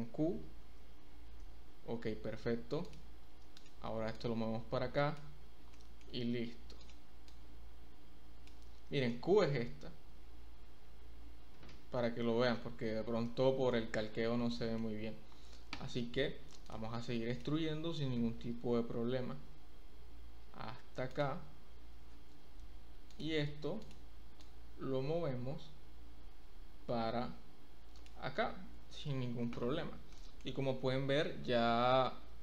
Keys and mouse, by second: 2.8 click, 4.2 click, 5.7 shift+click, 5.8 shift+middle click, 7.4-8.4 drag, 9.0 shift+middle click, 10.8 k, 11.5 k, 13.2 shift+middle click, 14.5 shift+middle click, 16.6 click, 18.5 e, 21.1 click, 23.1 click, 23.7 click, 24.4-28.0 drag, 29.4 Tab, 30.2 shift+click.